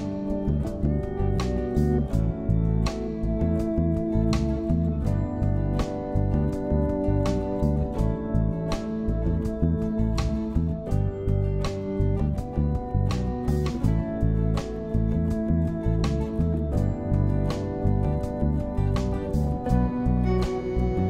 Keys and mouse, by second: 6.1-8.8 drag, 10.1-14.3 drag, 16.9 click, 17.9 click, 19.5-20.8 drag.